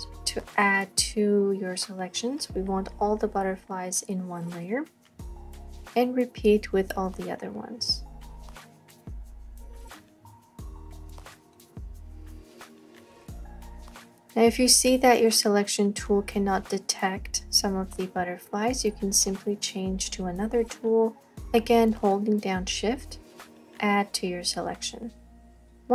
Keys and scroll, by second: 25.6 space.